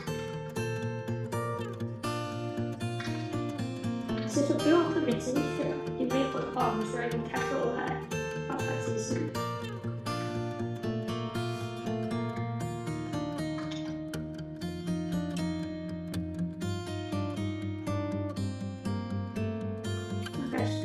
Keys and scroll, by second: 1.2 r, 2.8 2, 6.1 p, 13.5 alt+w.